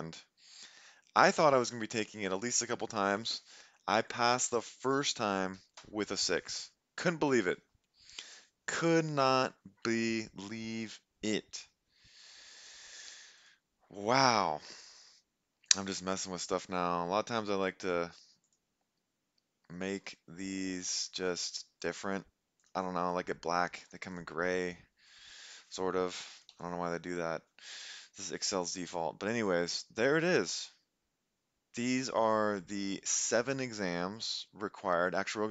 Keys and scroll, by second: 5.6 6, 5.8 Return, 26.4 ctrl+b, 26.5 ctrl+u.